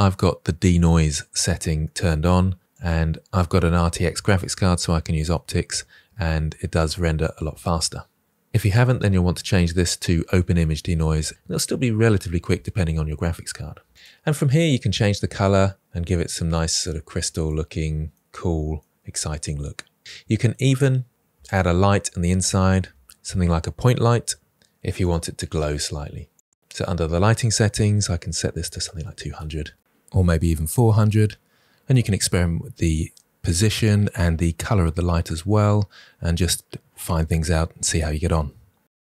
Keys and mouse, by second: 0.3 click, 1.6 click, 2.9 click, 4.8-6.1 drag, 6.4 click, 8.0 click, 8.7-13.9 drag, 14.2-14.7 middle drag, 15.7 click, 18.2 middle drag, 18.9 middle drag, 20.0-20.4 drag, 21.7 shift+a, 24.0-27.0 drag, 26.8 0, 27.5 middle click, 28.4 click, 29.2 0, 30.7 g, 31.8 middle click, 32.7 click, 33.1 0, 33.8 g, 34.2 click, 34.4 middle click, 35.0 drag, 35.9 click, 36.6 click, 38.0 click, 38.3 click, 38.6 click.